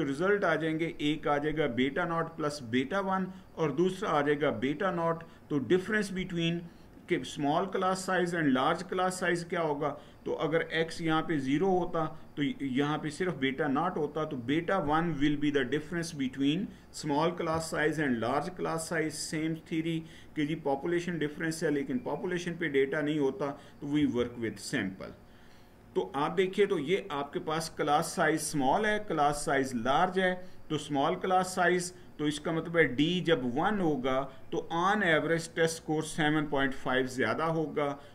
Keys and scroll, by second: 23.7 Right.